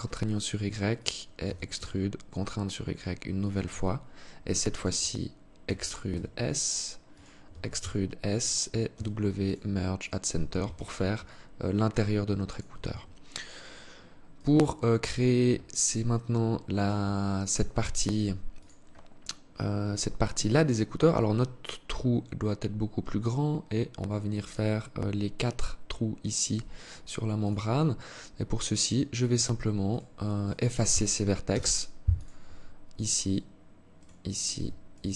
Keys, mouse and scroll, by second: 0.9 e, 3.3 alt+click, 5.2 e, 7.1 e, 8.5 w, 10.2 Tab, 10.8 alt+click, 12.5 Tab, 13.9 right click, 14.7 right click, 15.3 alt+click, 29.4 right click, 30.0 right click, 31.0 Delete, 33.5 right click, 34.5 shift+right click.